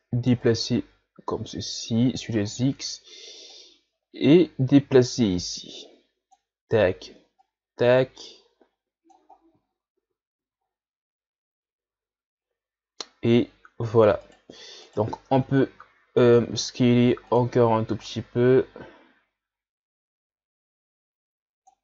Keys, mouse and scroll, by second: 0.1-0.5 scroll down 1, 0.5-2.5 drag, 2.5-3.5 scroll down 5, 3.5-6.5 drag, 7.5-9.4 drag, 9.4-9.7 scroll down 1, 9.7-10.0 scroll up 2, 10.0 Tab, 10.4 a, 10.7-13.4 scroll down 1, 13.4-14.2 scroll up 2, 14.2 right click, 14.9 right click, 15.2 Tab, 15.5 a, 15.8 a, 16.3 s, 18.0-21.1 drag.